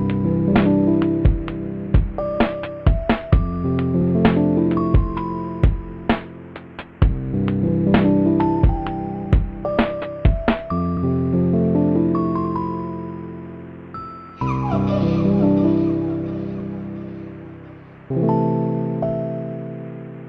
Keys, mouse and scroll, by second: 0.6 [, 3.7 right click, 7.9 ctrl+-, 10.4 right click, 12.2 ctrl+-, 13.5 ctrl+z, 17.3 ctrl+z, 18.5 right click, 18.8 right click.